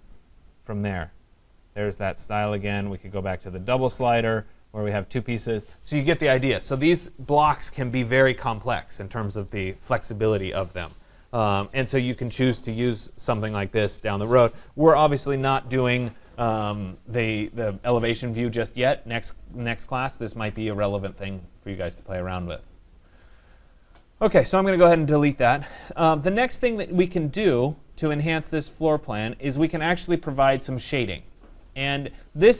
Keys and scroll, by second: 26.1 Delete.